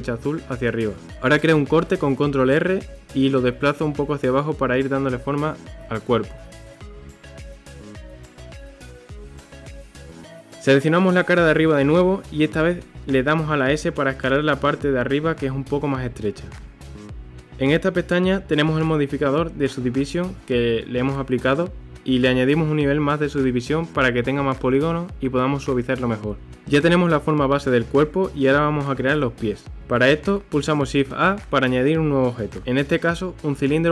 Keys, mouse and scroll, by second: 1.0 ctrl+r, 8.1 scroll down 1, 8.3 middle click, 9.0 scroll up 1, 9.2 shift+middle click, 9.9 click, 10.3 3, 10.6 click, 12.4 KP_1, 13.8 s, 17.4 click, 19.4 Tab, 21.5 click, 24.1 click, 25.4 scroll down 1, 25.7-28.7 middle drag, 29.8-31.1 shift+middle drag, 31.1 shift+a.